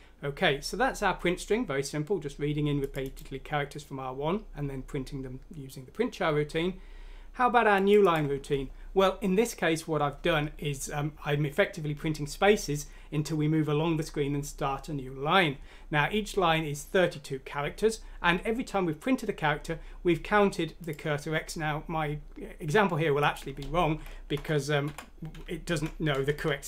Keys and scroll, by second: 24.3-26.6 typing, 25.7 Escape.